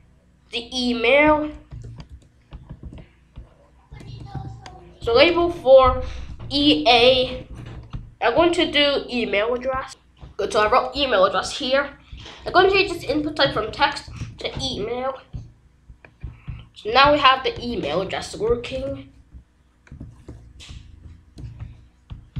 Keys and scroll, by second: 1.7 Return, 2.0 ctrl+v, 2.8 ctrl+s, 3.9 BackSpace, 4.3 e, 5.0 a, 5.4 Right, 6.9 BackSpace, 12.4-14.6 typing, 18.7 r, 19.9 shift+3, 20.6 BackSpace.